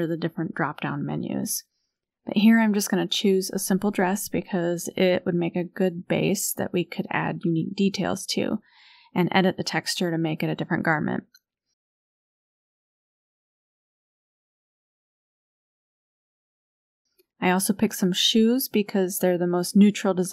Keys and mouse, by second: 0.2-1.3 drag, 1.9-3.0 drag, 3.3-7.0 drag, 15.8 click, 16.5-20.3 drag.